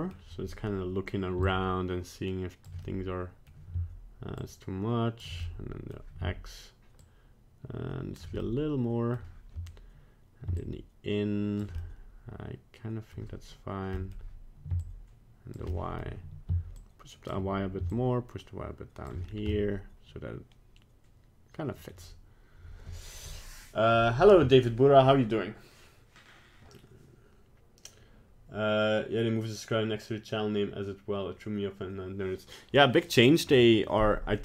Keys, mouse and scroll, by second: 1.4 shift+click, 2.8 middle click, 4.3 shift+click, 5.4 middle click, 6.9 shift+click, 8.4 middle click, 10.5 shift+click, 11.7 middle click, 14.0 middle click, 14.8 shift+click, 15.7 middle click, 16.7 shift+click, 17.9 shift+click, 19.2 scroll down 1, 19.5 middle click, 21.6 middle click, 21.7 middle click, 21.8-23.7 scroll down 1.